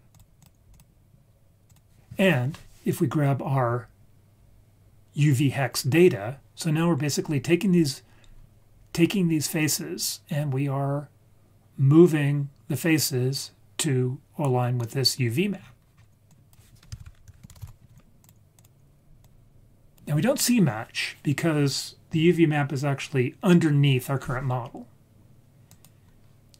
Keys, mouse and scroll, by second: 0.7-1.7 drag, 15.6-16.0 scroll down 3, 16.0-16.6 scroll up 3, 16.3 click, 17.0 shift+a, 19.2-20.0 drag, 25.7 click.